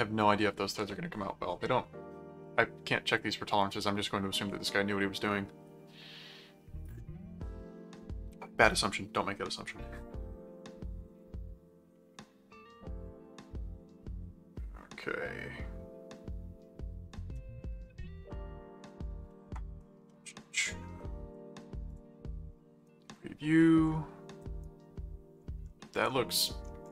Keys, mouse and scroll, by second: 21.0 right click, 21.9 click, 22.9-24.4 right drag, 24.6 right click.